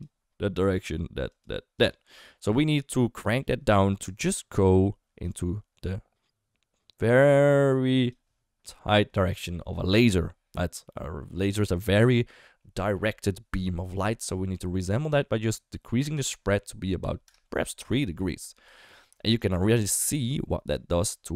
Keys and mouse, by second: 0.7 click, 1.3 click, 1.8 click, 1.9 d, 2.0 d, 3.7 d, 4.1-8.1 drag, 8.1 d, 16.3 click, 19.2 shift+middle click, 19.5 d, 19.6-21.3 right drag.